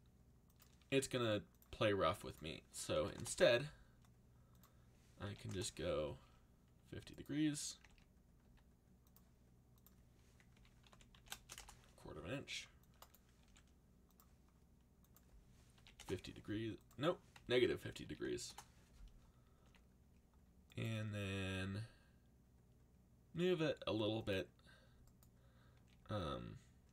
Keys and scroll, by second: 1.0 r, 2.7-3.5 typing, 5.5 Return, 7.4-8.4 typing, 10.3-13.4 typing, 15.5-16.3 typing, 17.5 ., 18.0 5, 18.4 Return, 19.6 a, 21.4 g, 25.7 g.